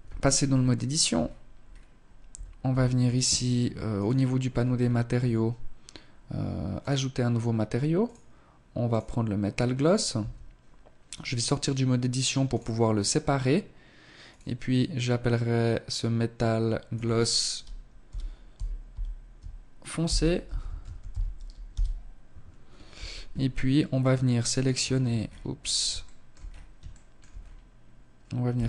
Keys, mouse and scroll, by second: 0.1-1.2 scroll up 3, 1.2-1.5 scroll up 1, 1.2 a, 1.5 a, 2.8 click, 3.4-4.7 scroll up 7, 5.6 click, 6.8 click, 9.0 Tab, 11.3 click, 13.1 click, 21.8 Tab, 22.3-22.8 scroll up 1, 22.8 middle click, 22.8 scroll up 2, 23.6-25.8 scroll up 14, 24.9 shift+middle click, 25.8 shift+middle click, 26.2-27.4 scroll up 2, 27.5 alt+right click.